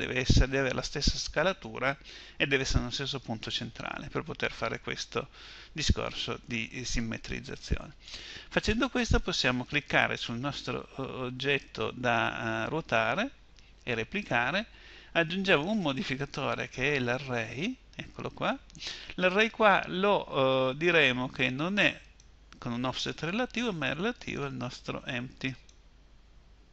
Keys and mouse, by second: 8.7-14.8 right drag, 14.8-16.7 drag, 21.4-26.7 drag.